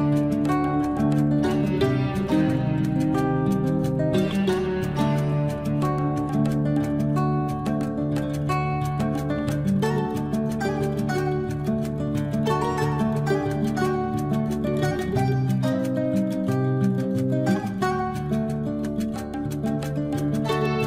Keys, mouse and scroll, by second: 0.6 l, 1.6 click, 1.6 click, 3.0 space, 4.5 scroll down 1, 6.6-6.9 scroll down 1, 11.0 scroll down 1, 11.6 click, 11.7 click, 13.8 Escape, 14.2 click.